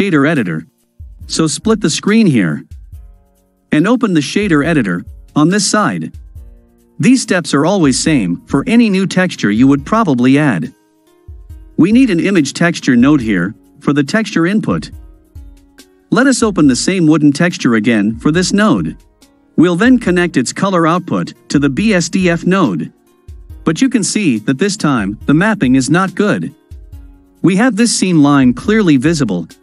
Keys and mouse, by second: 4.2-5.3 drag, 6.5-7.7 drag, 9.5 middle drag, 9.7-10.1 drag, 10.1-10.9 middle drag, 11.8-14.9 drag, 15.9 click, 20.5-22.1 drag, 24.5-27.0 middle drag, 29.4-29.6 middle drag.